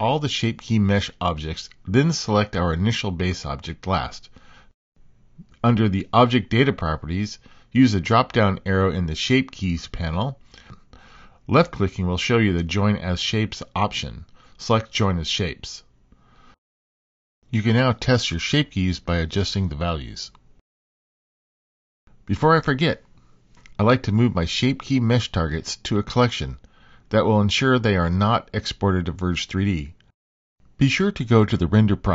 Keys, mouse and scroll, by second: 0.6 click, 2.6 shift+click, 3.4 shift+click, 4.8 shift+click, 5.7 shift+click, 7.2 click, 9.5-10.7 right drag, 12.7-14.4 drag, 17.3-20.3 drag, 22.9 click, 25.5 shift+click, 28.9 click.